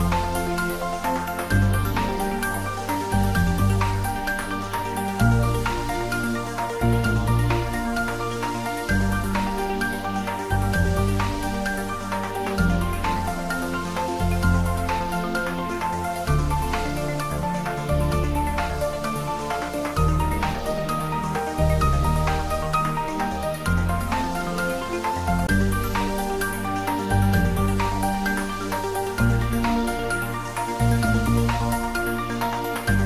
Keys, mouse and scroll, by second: 1.3 click, 1.6-2.1 scroll down 1, 2.6 scroll down 1, 2.6-4.6 middle drag, 4.6-5.3 scroll up 1, 5.6 click, 7.4-9.1 middle drag, 8.9-9.8 typing, 11.8 click, 12.8 2, 14.5 3, 15.0-15.4 scroll down 1, 15.4 middle click, 16.1 scroll down 1, 16.6 middle click, 17.3 scroll down 1, 18.3-20.5 middle drag, 20.9 3, 21.7-23.8 middle drag, 23.8-25.8 middle drag, 25.8 click, 26.2-26.6 scroll down 1, 29.9 shift+click, 30.5 middle click, 31.7 middle click, 32.3 shift+click, 32.8 shift+middle click.